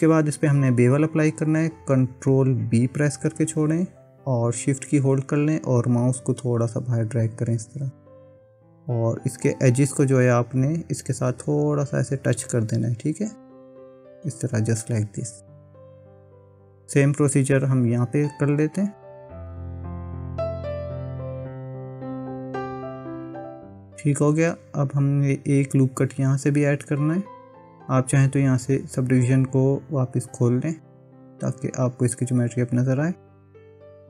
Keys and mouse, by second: 3.4 ctrl+b, 19.4 ctrl+r, 20.5 ctrl+r, 21.0 ctrl+r, 22.5 ctrl+b, 30.2 click.